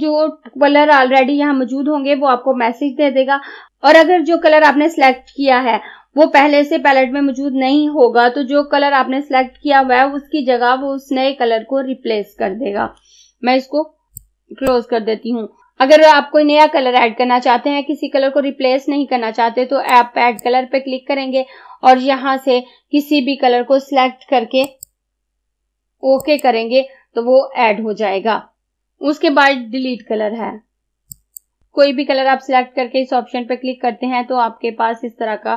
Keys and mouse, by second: 14.2-15.6 drag, 20.0-22.9 drag, 24.7 click, 31.2 click.